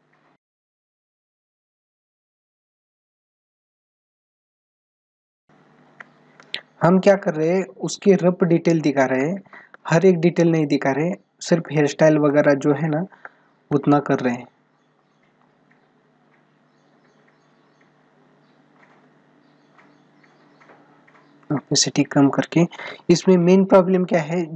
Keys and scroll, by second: 3.2 space.